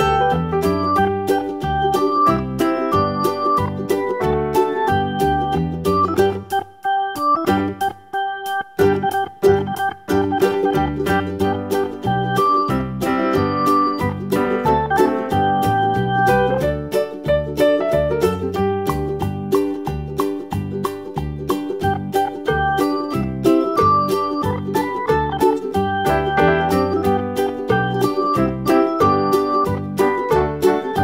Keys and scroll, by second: 11.3 super+c, 11.5 super+v, 28.4 Right, 28.6 Right, 28.8 Right, 29.0 Right, 30.6 super+d.